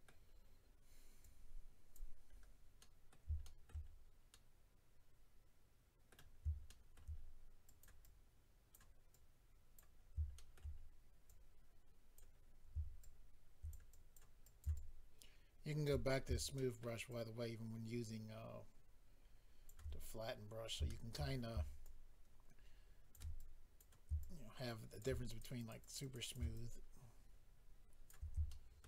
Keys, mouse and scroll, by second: 0.3-1.2 scroll up 4, 1.2 click, 2.3-2.8 scroll down 3, 2.8 middle click, 3.4 shift+middle click, 3.8 middle click, 3.8-4.3 scroll down 2, 4.3 middle click, 6.3-7.0 scroll up 2, 6.7 shift+middle click, 7.0 shift+scroll down 1, 7.1 scroll up 2, 7.7 click, 7.7 scroll up 1, 7.8 click, 8.0 click, 9.1 click, 10.0-10.3 scroll up 3, 10.3 shift+middle click, 10.8 shift+scroll down 1, 11.3 click, 12.4-13.0 scroll down 2, 13.0 shift+click, 13.9 click, 14.4 click, 14.7 shift+click, 15.8 click, 16.1-16.5 scroll down 1, 16.5 shift+middle click, 17.1 shift+click, 20.0-20.9 scroll down 2, 20.9 shift+middle click, 21.3-21.8 scroll up 3, 21.8 shift+click, 23.4 click, 24.2 shift+click, 25.0 click, 25.2 click, 25.4 click, 25.5 click, 25.7 double click, 25.8 click, 25.9 click, 26.0 click, 26.1 double click, 26.2 click, 26.3 click, 26.5 double click, 28.4 shift+middle click.